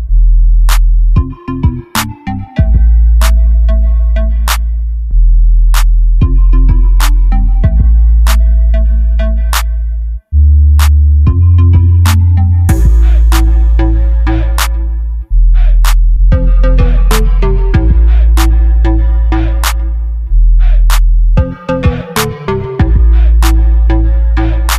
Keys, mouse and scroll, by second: 5.4-7.2 middle drag, 8.7 middle click, 10.1 middle click, 10.5 middle click, 11.7 click, 12.5 middle click, 14.7 middle click, 16.7 middle click, 17.0 click, 17.7 middle click, 18.3 click, 18.9 KP_0, 20.7 click.